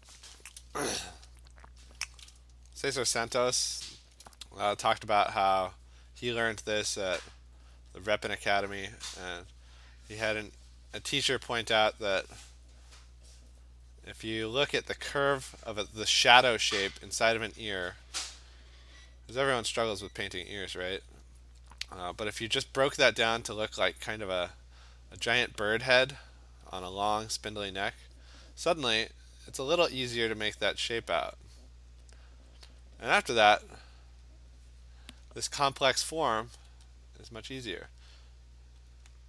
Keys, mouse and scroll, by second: 1.8 click, 7.7 alt+click, 11.5 click, 13.7 click, 14.4 click, 15.3 click, 16.6 click, 17.0 alt+click, 18.6 alt+click, 19.0 click, 19.7 alt+click, 20.9 click, 22.3 alt+click, 22.8 click, 23.3 click, 25.0 click, 25.6 alt+click, 26.4 click, 27.9 alt+click, 28.5 click, 29.2 click, 29.3 alt+click, 29.9 alt+click, 30.9 click, 31.1 click, 31.3 click, 31.4 alt+click, 32.2 alt+click, 32.6 alt+click, 33.0 alt+click, 34.3 click, 34.7 click, 35.0 click, 36.7 alt+click, 37.8 click, 38.9 alt+click.